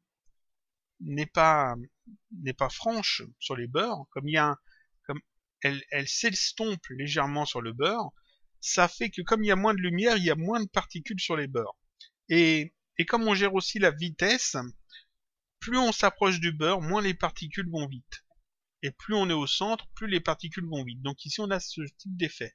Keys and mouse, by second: 0.0 click, 1.7 click, 3.3 click, 4.8 click, 5.9 click, 21.4 click.